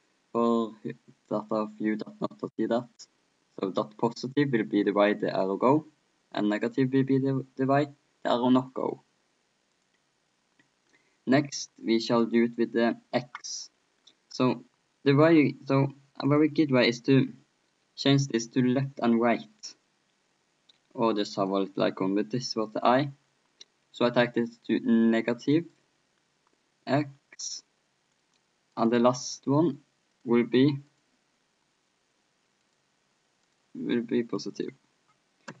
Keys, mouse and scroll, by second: 4.1-6.0 drag, 6.5-8.4 drag, 9.7-10.9 drag, 10.9-12.2 middle drag, 12.2-14.0 drag, 13.8-16.3 middle drag, 16.3-18.0 drag, 21.4-23.3 drag, 23.1-25.5 middle drag, 25.5-27.7 drag, 28.9-31.5 drag, 29.8-35.6 middle drag.